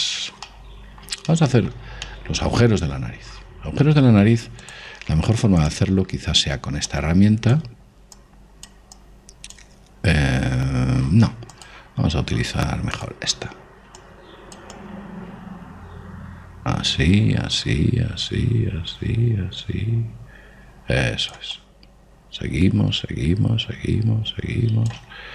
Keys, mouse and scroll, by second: 1.0-4.9 middle drag, 5.2 click, 7.4-11.4 drag, 12.1 click, 14.6-17.2 drag, 22.1 click.